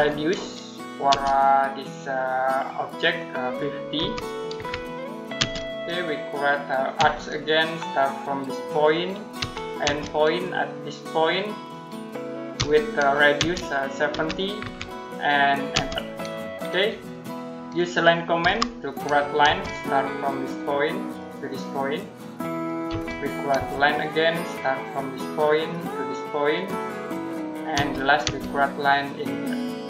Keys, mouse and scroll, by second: 0.9 space, 3.8-5.2 typing, 8.5 click, 9.2 e, 9.7 space, 11.4 click, 12.4-14.5 typing, 15.6 space, 16.9 middle click, 18.3 l, 19.3 space, 20.9 click, 22.7 space, 24.9 click, 27.6 space, 29.2 click.